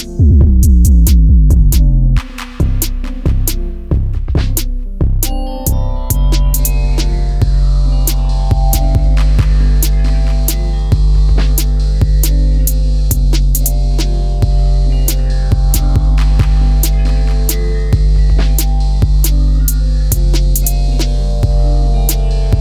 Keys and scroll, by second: 22.5 ctrl+g.